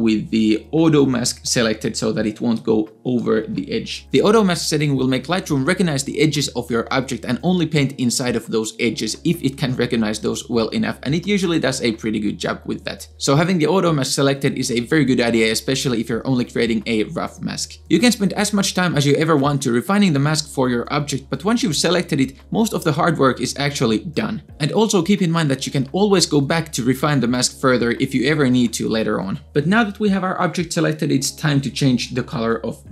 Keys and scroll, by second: 1.0-1.8 typing, 3.7 space.